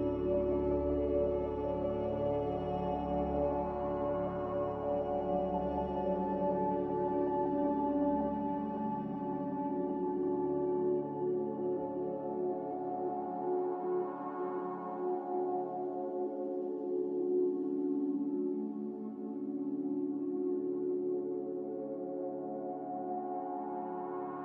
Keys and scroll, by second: 9.8 c, 18.8 ctrl+z, 22.0-22.7 typing.